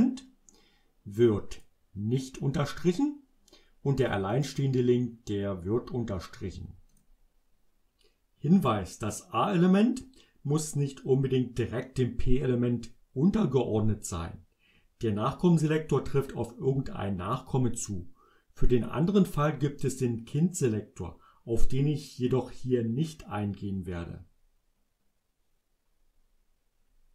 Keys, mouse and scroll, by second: 4.1 click, 4.4 click, 7.0 click.